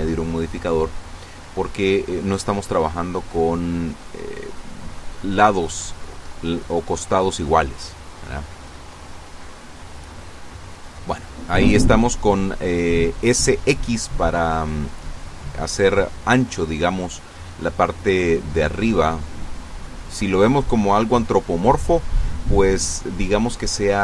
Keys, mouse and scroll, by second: 2.0-4.6 drag, 5.0-5.9 typing, 8.8 click, 17.9 ctrl+r, 19.0 Escape, 19.8 Escape.